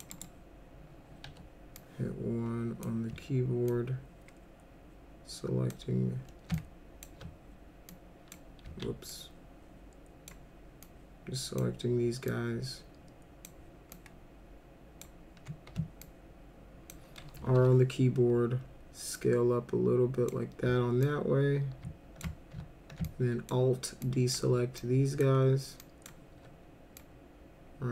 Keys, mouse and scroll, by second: 0.1 right click, 1.2 1, 1.8-2.8 drag, 3.7-5.7 ctrl+drag, 6.6 alt+click, 7.9 ctrl+click, 8.7 ctrl+z, 9.1-10.3 ctrl+drag, 10.8 ctrl+click, 12.3-13.5 ctrl+drag, 13.9-15.0 ctrl+drag, 16.0 ctrl+click, 17.6 r, 19.1-20.3 drag, 21.0-22.2 drag, 23.1 alt+click, 24.0 alt+click, 24.8 alt+click, 25.8 alt+click, 27.0-27.9 drag.